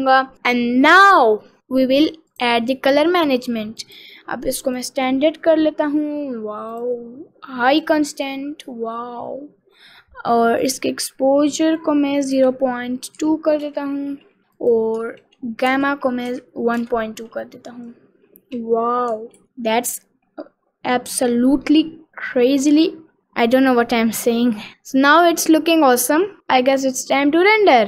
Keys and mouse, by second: 2.5 click, 3.9-5.3 drag, 7.0-8.4 drag, 10.9-14.1 drag, 14.7-17.4 drag, 19.4 ctrl+s, 23.5 click.